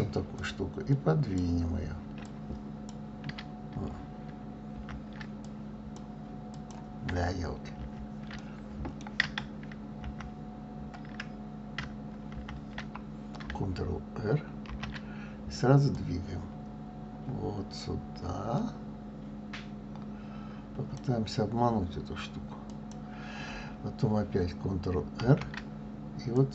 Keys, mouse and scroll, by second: 2.2 click, 4.7 ctrl+z, 5.4 click, 6.5 click, 7.8 ctrl+z, 8.4-10.1 middle drag, 10.1 ctrl+z, 12.3 ctrl+z, 14.7 ctrl+r, 25.2 ctrl+r.